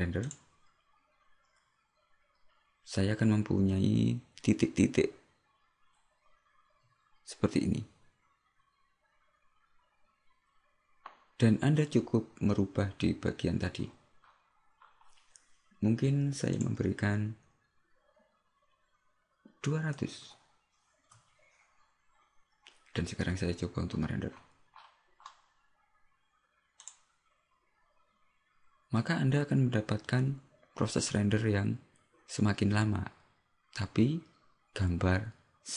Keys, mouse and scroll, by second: 0.4 click, 0.4-0.8 scroll up 1.